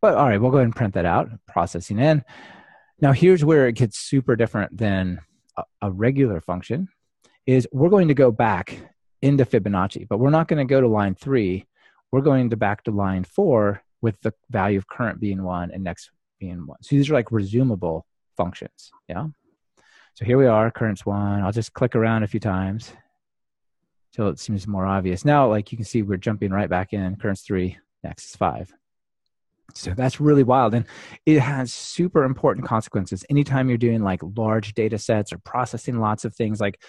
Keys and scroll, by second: 0.6 alt+shift+F7, 19.8 alt+shift+F7.